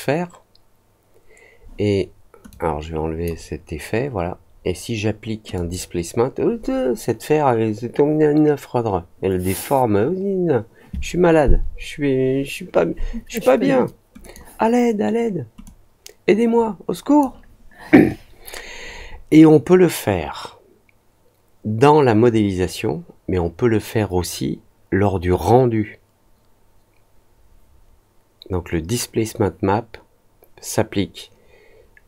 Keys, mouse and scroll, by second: 2.4-3.2 drag, 5.5 click, 14.2 click, 15.6-17.1 drag.